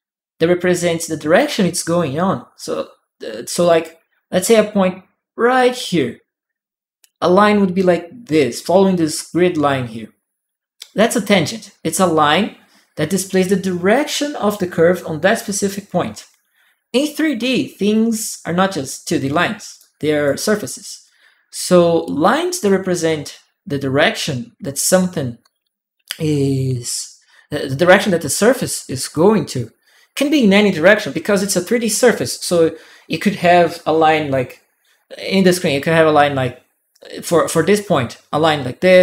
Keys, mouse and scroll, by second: 19.6 click.